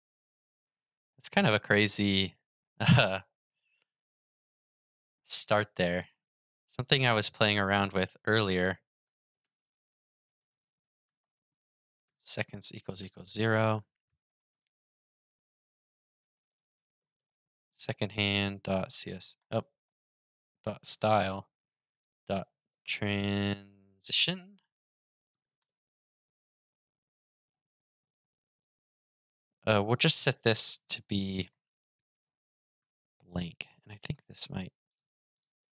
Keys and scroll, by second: 33.8 super+s, 35.3 super+r.